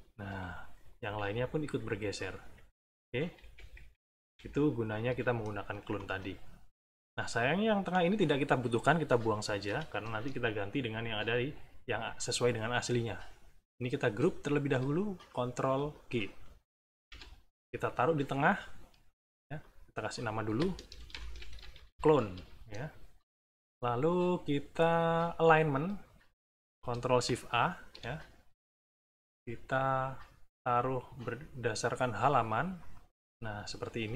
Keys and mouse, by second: 0.7 Left, 1.2 Down, 1.6 Left, 2.8 Right, 4.3 Up, 5.9 click, 7.8 click, 9.6 Delete, 12.7 click, 13.8 click, 15.2 shift+click, 16.1 ctrl+shift+middle click, 16.8 ctrl+g, 19.6 click, 20.1 click, 20.7-22.3 typing, 27.2 ctrl+shift+a, 30.1 click, 30.7-31.9 drag, 32.3 click, 32.7 click.